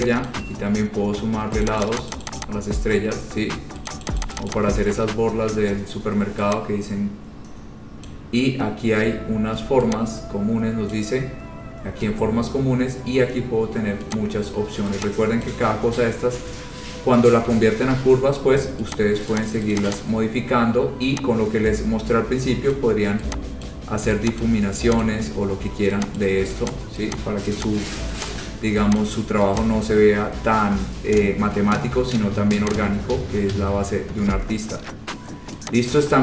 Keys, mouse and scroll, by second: 0.4-2.6 ctrl+click, 1.8 click, 2.0 click, 2.2 click, 2.3 click, 2.4 click, 2.6 click, 4.1 click, 4.3 click, 4.4 click, 4.6 click, 4.7 click, 8.3 click, 10.8 click, 11.1 click, 14.4 click, 15.6 click, 16.4-16.8 scroll, 17.3 scroll, 18.0 ctrl+q, 19.1 click, 19.5 click, 19.9 click, 19.9 scroll down 4, 20.0 click, 22.9 click, 23.8 click, 24.6 click, 25.2 click, 25.7-26.0 scroll, 26.4 click, 26.9 click, 27.4 click, 27.8 click, 28.5 click, 29.2 click, 29.8 click, 30.1-30.6 scroll, 31.9-32.3 scroll, 33.0 click, 33.6-34.4 scroll, 34.5-34.9 scroll.